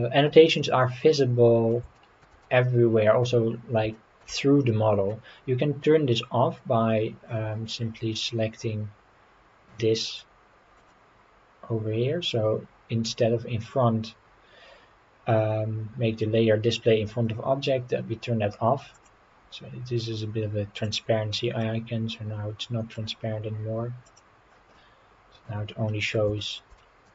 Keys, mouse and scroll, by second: 0.6-1.7 middle drag, 2.0 shift+middle click, 2.4 middle click, 3.9 shift+middle click, 4.4 middle click, 10.8 click, 19.0 click, 20.8 click, 21.6-23.0 middle drag, 24.1 click, 24.7-26.2 middle drag, 26.4 shift+middle click, 26.8 middle click.